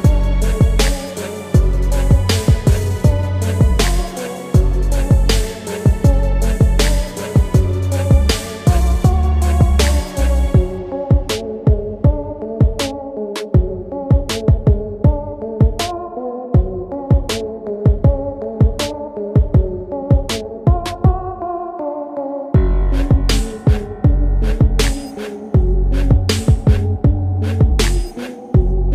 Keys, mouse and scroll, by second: 0.8-2.9 drag, 2.9-4.0 scroll down 6, 4.0-5.1 drag, 5.1-5.8 scroll down 2, 5.8-8.1 drag, 8.1-9.0 scroll up 3, 9.0 middle click, 11.1-12.6 scroll up 4, 12.6 Tab, 14.5-18.0 drag, 18.4-19.7 drag, 19.7 g, 24.1 s, 27.1 Tab, 27.3-27.9 scroll down 2, 27.9-28.9 middle drag.